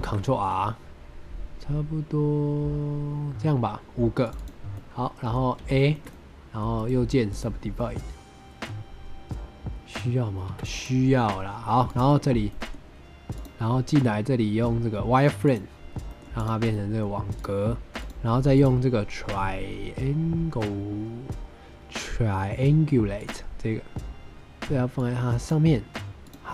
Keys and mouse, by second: 4.2 click, 4.6 middle click, 5.5 a, 5.8 middle click, 6.0 middle click, 6.6 right click, 7.7 click, 10.4 Tab, 12.4 middle drag, 13.3-15.4 drag, 16.0 middle click, 16.3 click, 16.7 middle drag, 18.4-23.2 drag, 24.9 click.